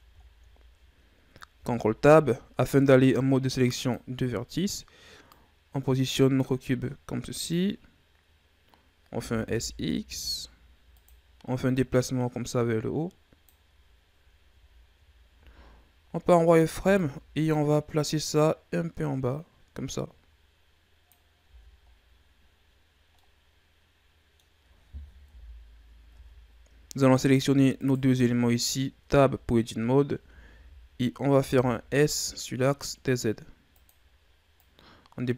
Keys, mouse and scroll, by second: 0.2-0.5 scroll down 2, 0.5-1.5 scroll up 5, 1.5 ctrl+Tab, 4.4-5.3 scroll up 2, 5.3-8.3 drag, 9.1 s, 11.7-13.8 drag, 13.8-14.6 scroll up 1, 14.6 scroll up 1, 14.7-15.3 scroll down 2, 15.3 z, 16.4 right click, 16.6 b, 18.2-21.3 drag, 21.4 z, 21.8-23.1 scroll down 8, 23.1-25.2 middle drag, 25.2 KP_1, 26.1 Tab, 26.2-27.1 scroll up 3, 27.1 right click, 27.7 shift+right click, 28.4-29.0 ctrl+scroll up 1, 29.0 Tab, 29.5-30.1 scroll up 2, 30.1 a, 30.5 a, 31.3 s, 34.5-35.3 drag.